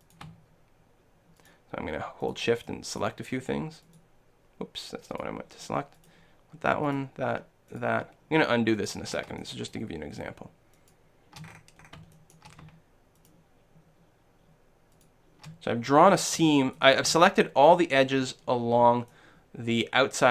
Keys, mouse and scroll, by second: 0.0-2.7 right drag, 2.7-4.3 drag, 2.7-4.7 shift+middle drag, 9.4-10.6 middle drag, 11.3 middle click, 11.5 click, 12.1 shift+right click, 12.3-16.7 shift+right drag, 15.8 middle click, 15.9 middle click, 16.7-18.2 middle drag, 18.8-20.3 middle drag.